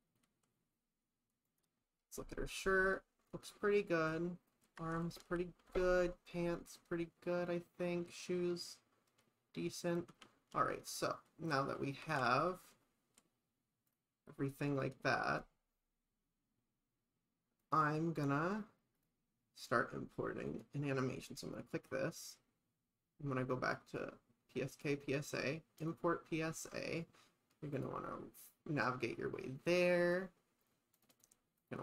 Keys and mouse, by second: 5.3 shift+middle click, 6.0 shift+middle click, 10.5 middle click, 10.8 middle click, 10.9 middle click, 11.3 click, 11.3 middle click, 14.8 click, 19.0 click, 20.5 click, 21.4 click, 23.9 click, 25.8 click.